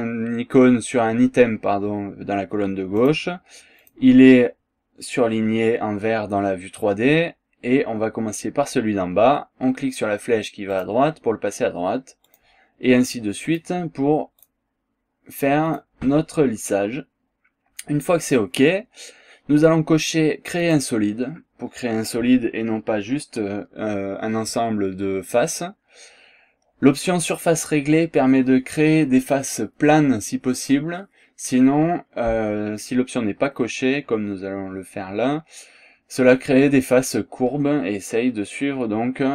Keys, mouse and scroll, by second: 3.0 click, 3.8 click, 10.8 click, 12.2 click, 13.5 click, 14.4 click, 15.6 click, 20.6 click.